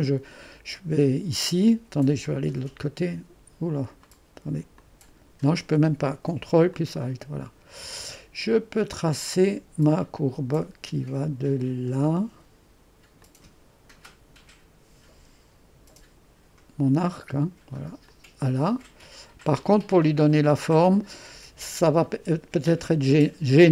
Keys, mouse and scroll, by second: 13.2-16.2 drag, 18.1-23.7 drag.